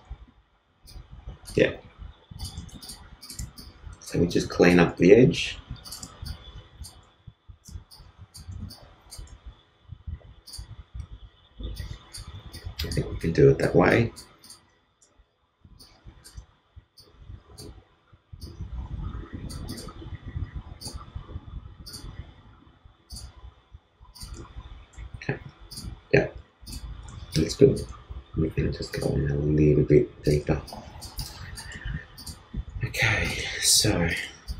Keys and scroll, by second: 2.5 shift+space, 5.9 shift+space, 7.6 shift+space, 9.2 shift+space, 11.5 shift+space, 24.3 shift+space, 27.0 shift+space, 30.4 shift+space.